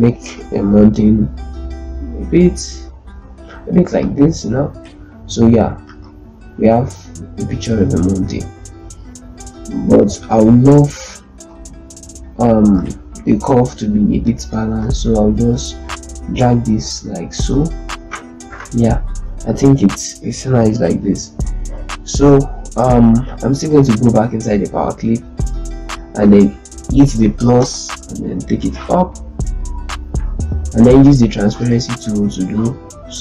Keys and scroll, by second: 5.6 z, 11.3 ctrl+space, 27.5 KP_Add, 32.1 F3.